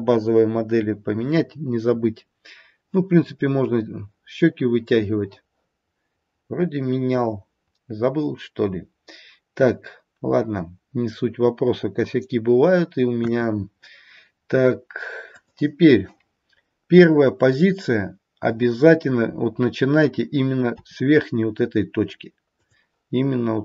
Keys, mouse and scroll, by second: 13.1 KP_1, 14.3-15.0 scroll down 1, 15.0 scroll down 1, 15.2 click, 20.7 r.